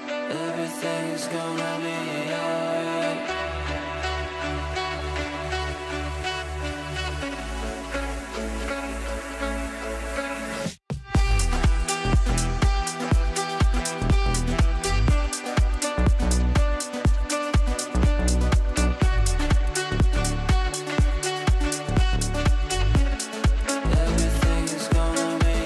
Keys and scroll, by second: 2.0 shift+F2, 5.3 Escape, 10.9 c, 21.8 Escape.